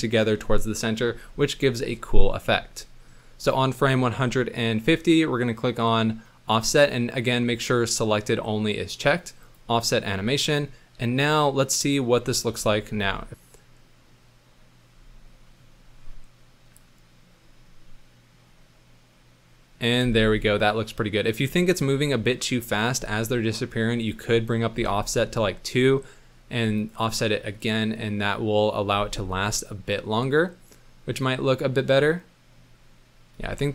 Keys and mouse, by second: 9.4 click, 11.3 click, 12.5 ctrl+s, 13.0 space, 15.4 middle drag, 20.0 space, 21.1 click, 22.5 middle click, 24.2 click, 26.8 click, 28.9 space, 33.4 space.